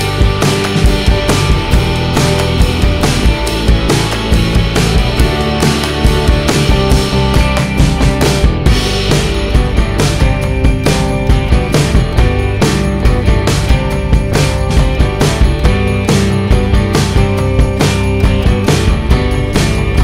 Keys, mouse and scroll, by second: 0.2 middle click, 0.9 alt+middle click, 2.5 click, 2.7 click, 3.6 middle click, 3.9 scroll up 1, 4.5 p, 5.8 middle click, 5.8 scroll down 1, 7.2 shift+click, 19.6 click, 19.7 click.